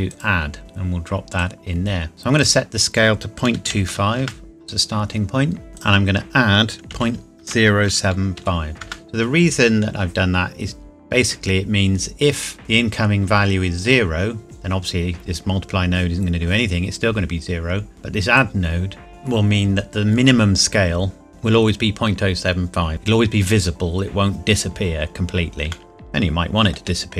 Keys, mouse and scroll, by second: 1.4 click, 3.5 KP_Decimal, 3.7 KP_2, 4.0 KP_5, 4.3 KP_Enter, 5.7 scroll up 1, 5.8 click, 6.9 KP_Decimal, 7.5 KP_0, 8.1 KP_7, 8.5 KP_5, 8.8 KP_Enter, 18.3 click, 24.7 scroll down 1, 25.9 shift+middle click.